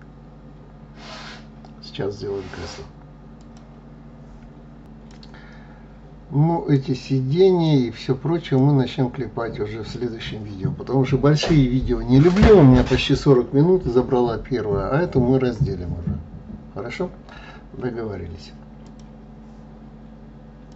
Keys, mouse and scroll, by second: 5.2-7.1 scroll down 7, 7.1-19.2 middle drag.